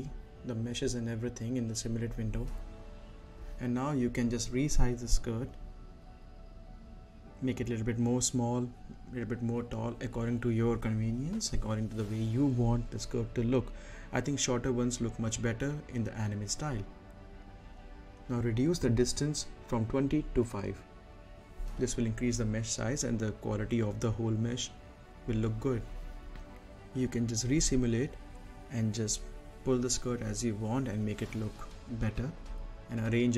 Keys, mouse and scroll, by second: 0.0 click, 1.1-1.6 scroll up 1, 1.6 space, 1.8 right click, 2.0 scroll up 1, 2.2 middle click, 2.7 click, 3.0 scroll up 1, 3.3 middle click, 3.7 scroll down 1, 4.1 middle click, 4.8 z, 5.3-7.2 drag, 7.2 Up, 11.8 click, 12.6-14.9 right drag, 14.9 click, 15.6 middle click, 16.1-19.6 drag, 19.6 scroll up 1, 20.6 click, 21.7 5, 22.6 click, 25.0 space, 27.3 right click, 28.1-29.5 drag, 30.0 right click, 30.6 middle click, 31.0 right click, 31.6 middle click, 32.1-33.3 drag.